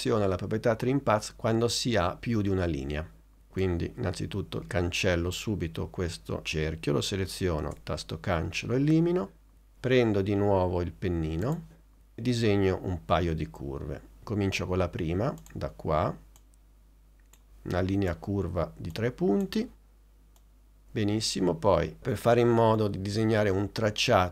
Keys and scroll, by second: 7.7 BackSpace.